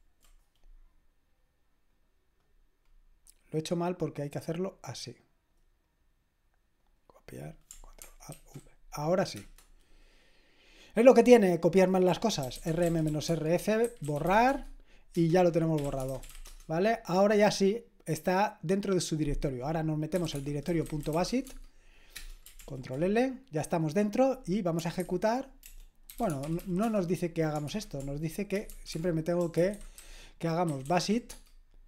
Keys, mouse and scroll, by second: 1.9-8.3 drag, 8.3 ctrl+alt+v, 9.4 Return, 12.2-16.8 typing, 15.1 Return, 19.9-21.8 typing, 22.1 Return, 22.6 ctrl+l, 25.9-31.8 typing.